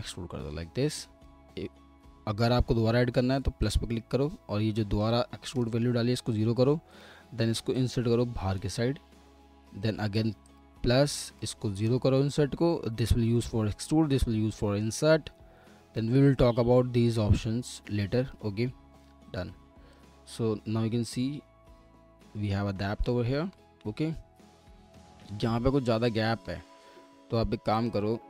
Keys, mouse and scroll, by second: 5.5 0, 26.5 alt+middle click.